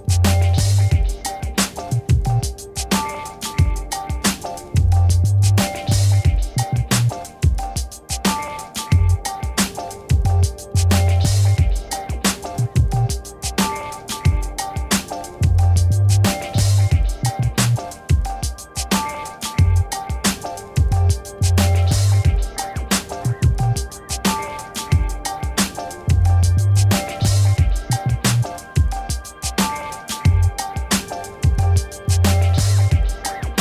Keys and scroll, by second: 13.6-15.6 typing, 16.1 Return, 19.4 ctrl+z, 29.1 t, 32.8 4, 32.9 0, 33.2 Return.